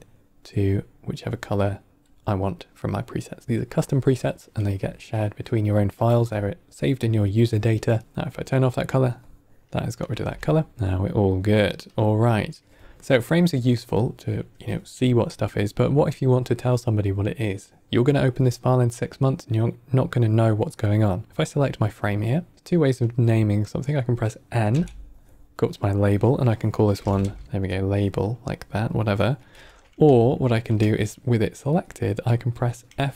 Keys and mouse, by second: 0.6 click, 1.5-2.5 drag, 8.0 click, 10.2 n, 10.7 ctrl+middle click, 10.9-11.6 drag, 11.8 click, 13.1-13.9 drag, 21.3-21.9 drag, 24.7 n, 25.7-28.0 drag, 29.4 n, 30.2-30.6 ctrl+middle drag, 31.1 middle click, 31.6 click.